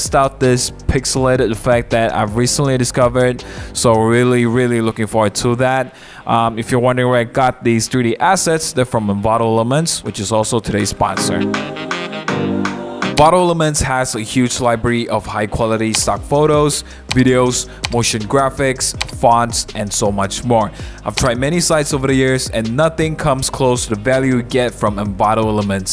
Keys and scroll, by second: 0.4 super+1, 0.8 super+=, 1.8 b.